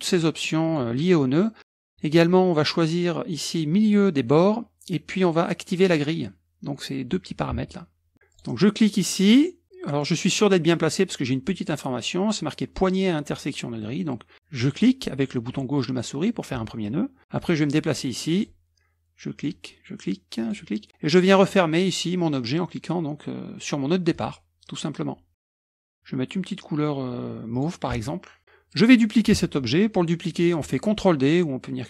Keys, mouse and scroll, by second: 0.1 click, 0.7 click, 3.8 click, 8.3 click, 14.6 click, 18.4 click, 19.4 click, 20.4 click, 24.1 click, 27.6 click, 28.4 click.